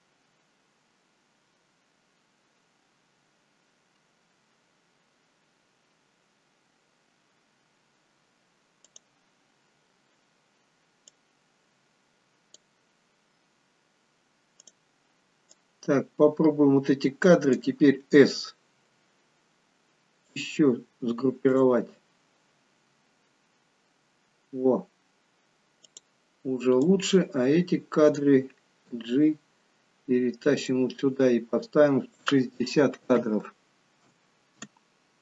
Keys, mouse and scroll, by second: 9.0 click, 11.2 click, 14.7 click, 15.7 click, 18.8 s, 21.5 click, 26.0 click, 26.9 click, 29.0 g, 32.1 click.